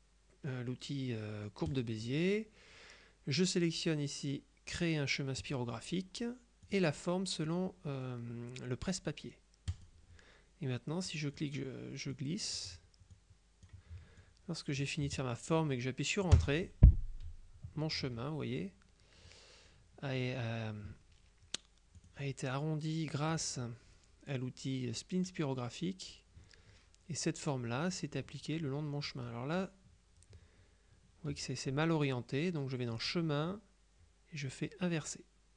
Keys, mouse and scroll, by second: 1.8 click, 5.5 click, 6.8 click, 9.8 click, 11.2 click, 12.2 click, 13.2-14.2 drag, 16.4 Return, 22.1 click, 23.4 click, 33.0 click.